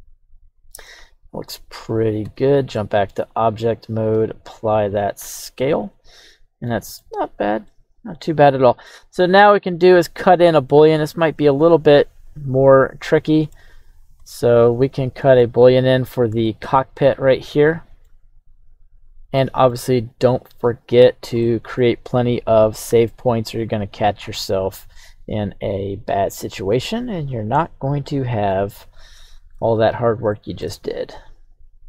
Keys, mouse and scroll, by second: 0.4 click, 0.8 middle click, 2.2 Tab, 2.8 middle click, 3.3 right click, 4.1 ctrl+a, 5.3 scroll down 1, 5.3-6.7 middle drag, 6.9 middle click, 7.3-7.7 scroll up 2, 7.7-8.9 middle drag, 9.4 scroll down 1, 9.6-13.5 middle drag, 13.9-14.3 scroll down 2, 14.2-15.4 middle drag, 16.4-18.0 middle drag, 19.0 click, 19.3-19.7 middle drag, 19.9-21.0 right drag, 21.0 h, 21.4-21.8 middle drag, 22.8 KP_1, 23.5-24.1 scroll up 2, 24.2-25.3 scroll down 3, 27.6-28.5 middle drag, 29.2-29.8 shift+middle drag, 29.8-30.2 scroll up 2, 30.3-30.8 shift+middle drag, 30.8-31.8 scroll up 1.